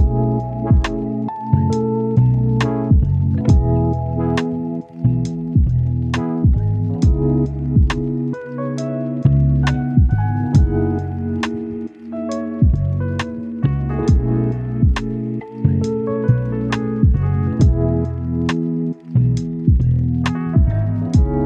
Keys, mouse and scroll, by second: 0.2 scroll up 1, 0.4 right click, 1.2 click, 1.9 right click, 2.4 scroll down 1, 2.5-3.2 scroll up 2, 2.7 right click, 3.4-5.7 drag, 5.7 scroll down 1, 5.8-6.7 scroll up 1, 6.7-7.3 scroll down 1, 7.3-16.0 drag, 16.3 scroll down 1, 16.4-17.0 scroll up 1, 17.0 click, 17.2 right click, 17.6 scroll down 1, 17.8 scroll up 1, 17.9 right click, 18.5 scroll down 1, 18.7 scroll up 1, 18.8 right click, 19.6 scroll down 1, 19.7 scroll up 1, 19.8 right click, 20.5 click, 20.6 scroll down 1, 20.7-21.4 scroll up 2, 20.8 right click.